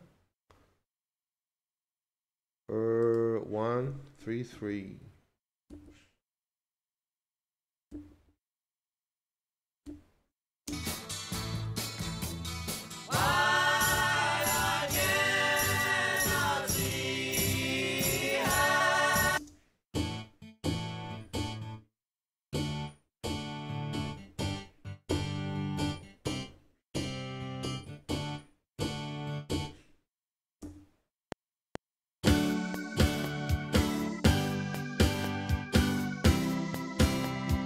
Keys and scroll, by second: 4.6 ctrl+shift+Right, 8.0 ctrl+shift+Right, 9.9 ctrl+shift+Left, 10.7 space, 19.4 space, 30.7 Tab, 31.1 F7.